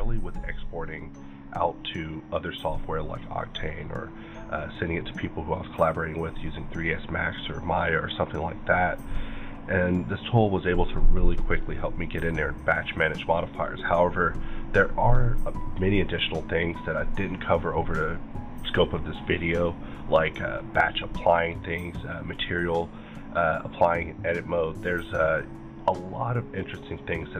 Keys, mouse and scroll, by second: 26.7 click.